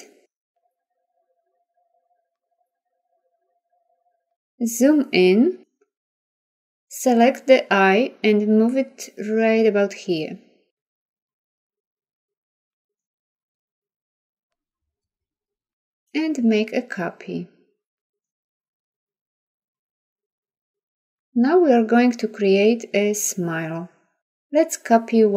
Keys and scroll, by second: 4.1 z, 8.0 v.